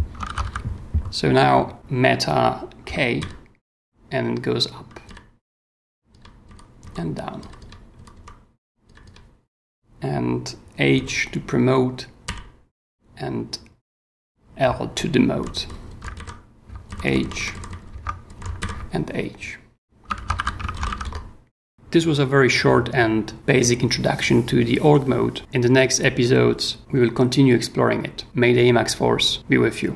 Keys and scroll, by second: 0.3 ctrl+w, 1.4 w, 3.2 super+k, 5.0 super+k, 6.4 super+j, 7.4 super+k, 7.9 super+j, 8.8 super+k, 10.9 super+h, 12.2 super+l, 14.9 super+j, 15.5 j, 16.0 super+j, 16.1 super+h, 16.9 super+j, 17.9 super+j, 18.6 super+h, 20.2 ctrl+w, 20.5-21.4 typing.